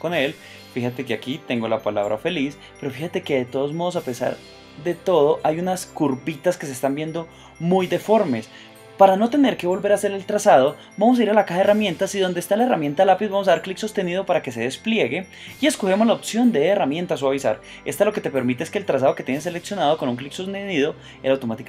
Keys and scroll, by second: 4.8 space.